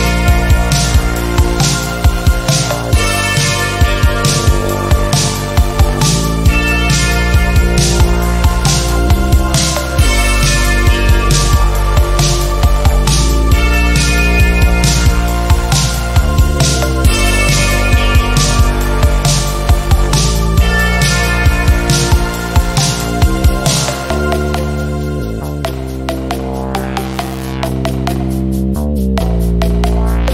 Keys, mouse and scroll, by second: 1.5-3.4 drag, 17.0 ctrl+z, 18.2-22.6 shift+drag, 24.5 ctrl+z, 25.6 click, 26.5 click, 28.2 ctrl+z, 28.6 click.